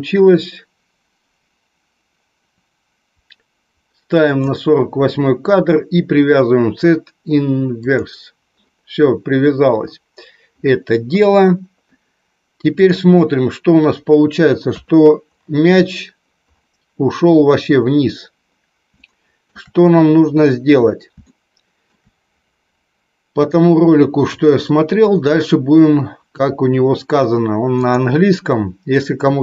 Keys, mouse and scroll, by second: 7.9-13.3 drag, 14.6 KP_3, 18.9 shift+middle click, 21.1 shift+middle click, 27.8-29.4 drag.